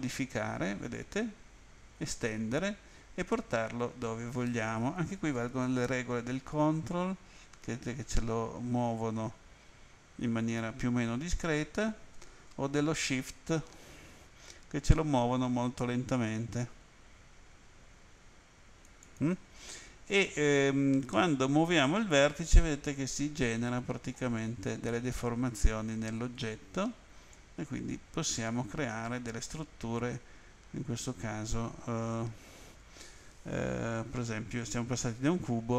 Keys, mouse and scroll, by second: 19.0 shift+click, 21.1 middle click, 26.2 right click, 27.3 click.